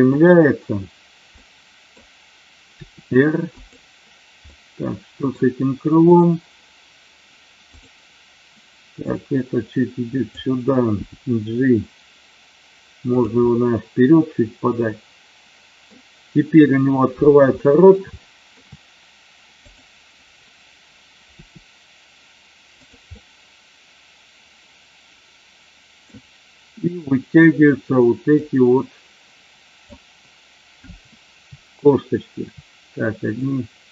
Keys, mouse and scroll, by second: 0.2 click, 1.3-1.8 middle drag, 3.6 click, 4.4 middle click, 6.1 click, 9.0-10.4 drag, 13.0 click, 13.5-15.9 middle drag, 17.6 scroll up 1, 17.7 middle click, 18.1 shift+middle click, 19.6 click, 21.2 r, 23.1-26.1 middle drag, 28.5-30.0 drag, 33.3-33.9 drag.